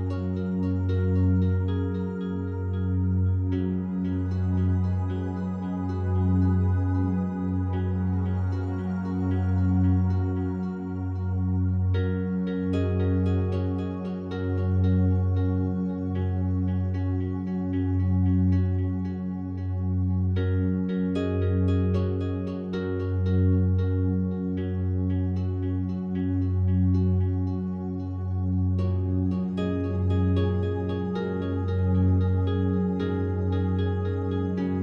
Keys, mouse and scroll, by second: 1.5 click, 2.3 s, 4.8 click, 5.3-14.0 alt+drag, 14.0 ctrl+r, 17.0 right click, 17.7-19.0 alt+drag, 19.0 a, 19.2 a, 20.1 right click, 24.7 click, 32.2 a, 32.6 a, 33.3 a, 33.9-34.8 alt+drag.